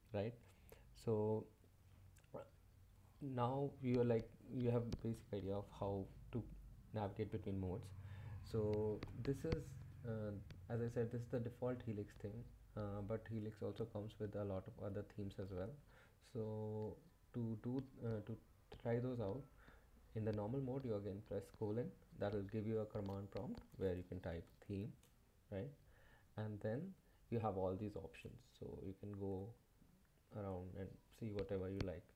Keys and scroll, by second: 9.1 Escape, 9.5 Left, 9.7 Left, 9.9 Left, 10.4 Left, 10.5 Left, 10.6 Left, 10.7 Left, 10.9 Up, 11.2 Up, 13.8 shift+;, 23.8-26.1 typing, 28.5 Tab, 29.1 Tab, 29.4 Tab, 29.9 Tab, 30.5 Tab, 31.7 Tab.